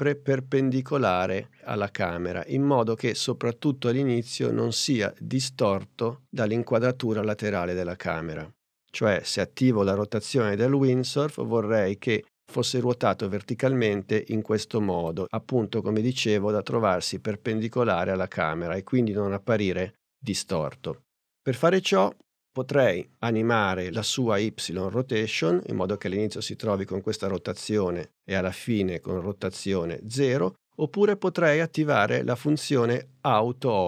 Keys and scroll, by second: 9.9 r.